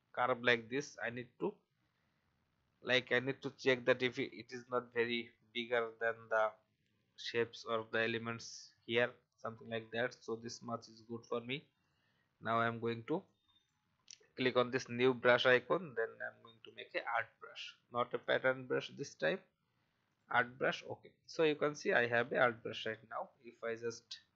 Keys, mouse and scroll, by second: 11.8 click, 23.9-24.3 alt+scroll down 1.